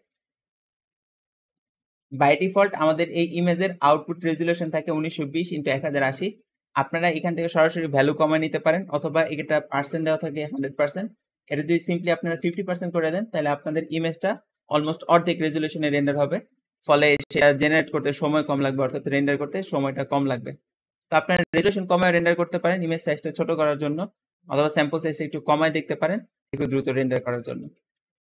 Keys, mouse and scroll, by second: 1.5 click, 8.3 Escape, 10.6-13.8 drag, 11.8 5, 11.8 KP_0, 12.0 5, 12.0 KP_0, 12.3 Return, 12.4 Return.